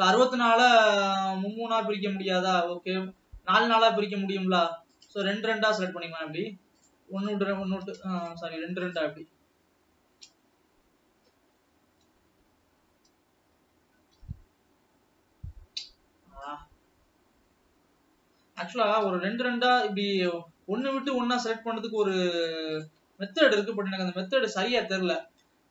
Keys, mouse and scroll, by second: 5.5 click, 6.0-6.5 shift+drag, 7.2 shift+click, 9.4 shift+click, 9.8 shift+click, 10.7-11.0 shift+scroll down 1, 11.3 shift+scroll down 1, 12.6 KP_1, 14.8 ctrl+KP_1, 16.9 click, 20.1 shift+click, 21.7 shift+click, 22.3 shift+click, 23.3 shift+click, 23.8 scroll down 1, 24.3-25.7 middle drag.